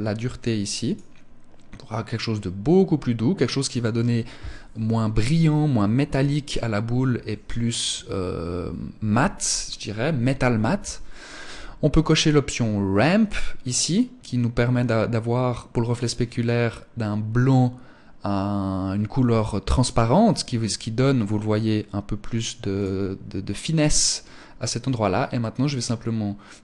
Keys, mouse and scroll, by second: 13.2 click, 20.6 click, 22.2 click, 24.6 click.